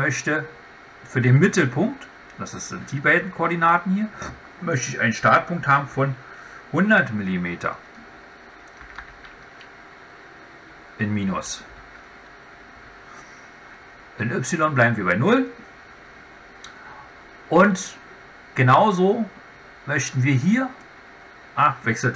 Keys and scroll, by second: 11.2 Left.